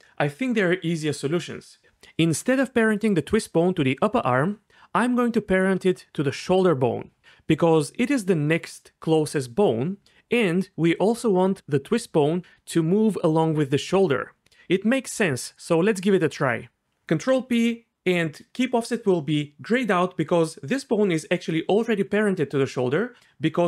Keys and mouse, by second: 16.8 ctrl+`, 16.8 ctrl+p, 17.3 ctrl+p.